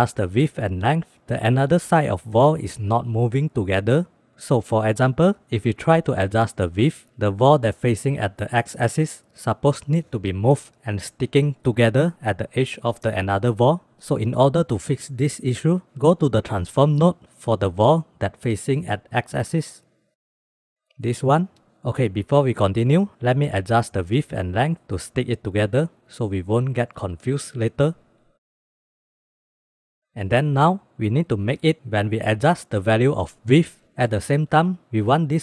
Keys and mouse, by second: 1.1 click, 1.8 click, 2.3 click, 7.6 click, 8.2 click, 9.2 click, 10.4 click, 11.0 click, 11.9 click, 13.1 click, 13.7 click, 18.1 middle click, 18.9 middle drag, 19.4 middle click, 19.6 middle click, 20.1-20.7 middle drag, 20.9 click, 21.3 m, 22.5 click, 23.7-24.5 drag, 24.7-25.1 drag, 25.3 shift+b, 26.7 click, 27.7 click, 28.4 click, 29.2-29.6 shift+drag, 29.8 ctrl+s, 31.9 click, 32.7 click, 34.0-35.3 middle drag, 35.3-35.4 drag.